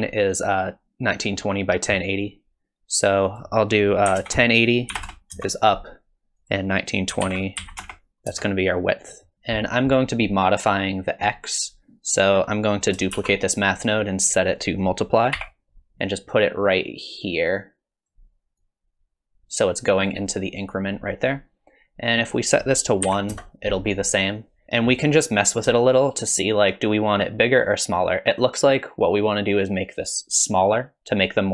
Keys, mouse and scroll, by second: 3.3 click, 6.4 click, 9.2 middle click, 9.3 middle click, 9.3 click, 9.3 scroll down 1, 11.6 click, 12.6 click, 13.1 shift+d, 14.5 click, 16.0 click, 18.6 click, 21.3-21.7 scroll up 2, 22.4 click, 24.6 click, 24.6 shift+middle click, 24.6-25.3 scroll up 1, 25.8 shift+click.